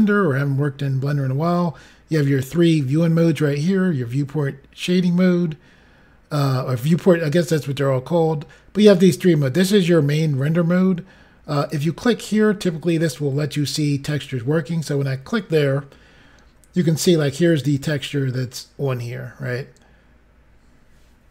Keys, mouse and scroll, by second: 11.5 click, 17.0-17.4 scroll up 2, 19.5 scroll down 1.